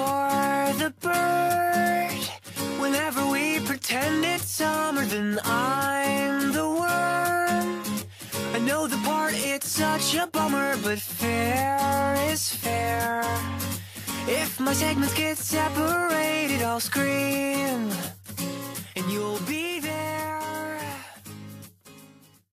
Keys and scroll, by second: 3.0 ctrl+z, 10.4 ctrl+z, 12.4 ctrl+z.